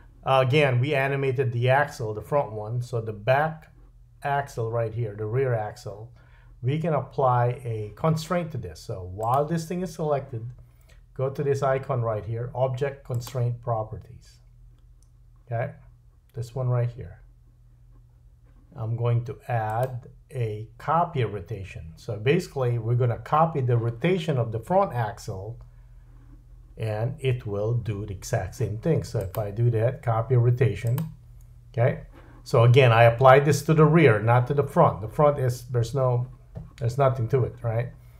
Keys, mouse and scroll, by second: 9.2 click, 13.1 click, 19.7-31.0 drag.